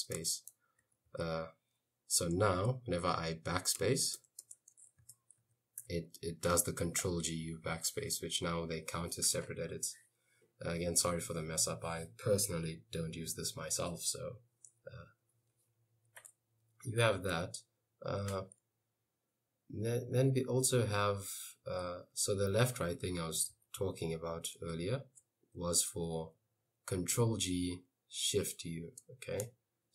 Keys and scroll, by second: 0.2 Return, 0.8 j, 1.1 k, 2.6 shift+a, 3.9-5.8 typing, 5.2 Escape, 7.1 u, 8.6 j, 9.0 k, 16.9-17.8 typing, 22.0-24.3 typing.